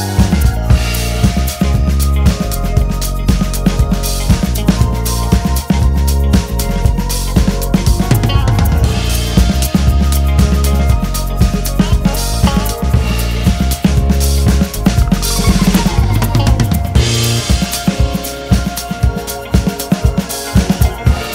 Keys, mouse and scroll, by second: 1.1 alt+s, 4.9 click, 6.0 alt+s, 7.5 shift+click, 7.7 click, 8.3 alt+s, 11.6 click, 12.0 alt+s, 14.5 click, 15.3 alt+s, 16.8 alt+a, 16.9 `, 17.6 `.